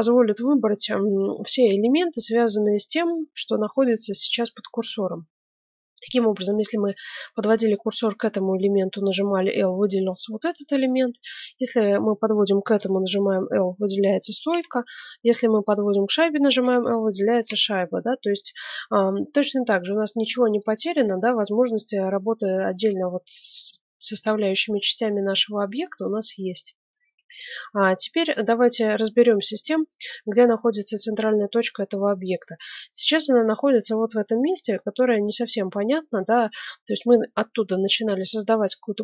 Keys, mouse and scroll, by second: 10.8 a, 12.7 l, 13.7-16.9 middle drag, 14.5 a, 16.6 l, 17.4 a, 18.0-20.0 drag, 20.5 click, 21.1-22.3 middle drag, 24.7-28.5 middle drag, 27.8 Tab, 29.2 middle click, 30.7-32.4 drag, 32.4-33.9 middle drag, 34.4-35.5 middle drag, 35.5 click, 35.8 middle click, 36.6-39.0 middle drag.